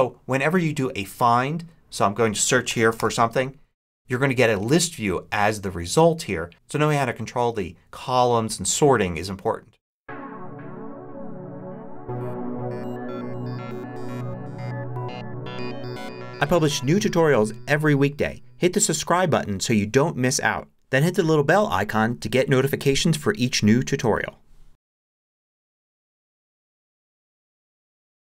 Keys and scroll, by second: 2.5 t, 2.6 e, 2.9 t.